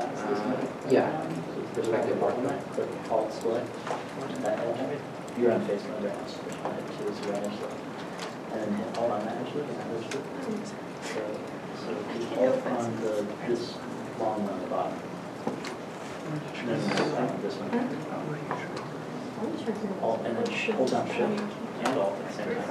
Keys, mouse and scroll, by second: 2.9 alt+click, 3.7 alt+q, 5.4 middle click, 7.1 scroll up 1, 7.9 middle click, 9.8 shift+middle click, 9.8-10.5 scroll down 1, 10.6 middle click, 12.8 shift+middle click, 13.4 scroll down 1, 22.4 Tab.